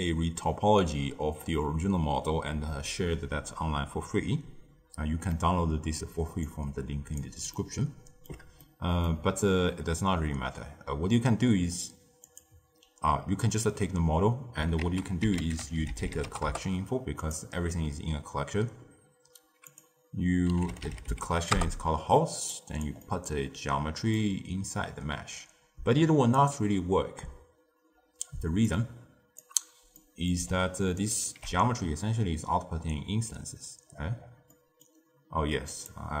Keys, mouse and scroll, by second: 6.4-7.5 drag, 7.5-11.6 ctrl+middle drag, 12.2 click, 14.7 ctrl+a, 15.7 l, 19.6-22.5 drag, 23.0-24.0 middle drag, 24.0 drag, 28.6 click, 29.9-31.0 middle drag, 31.0 alt+shift+click, 33.8-34.4 scroll down 7, 34.4-36.2 middle drag.